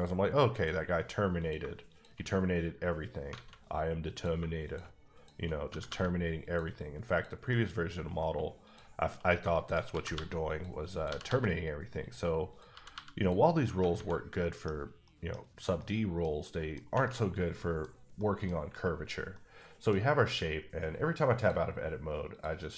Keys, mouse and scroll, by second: 0.5 click, 1.4 click, 1.9 shift+click, 3.3 alt+a, 4.1 click, 5.4 shift+double click, 5.7 g, 5.9 g, 6.4 click, 7.5 middle click, 8.6 click, 8.9 shift+click, 10.0 g, 10.1 g, 10.5 click, 10.9 click, 11.1 g, 11.2 g, 12.0 click, 12.7 g, 12.9 g, 13.1 click, 13.7 scroll down 1, 13.9 alt+a, 14.4 middle click, 15.3 middle click, 15.8 middle click, 16.4 middle click, 17.1 middle click, 17.8 scroll down 1, 18.2 middle click, 19.3 middle click, 19.9-20.3 scroll up 2, 21.4 click, 22.3 click.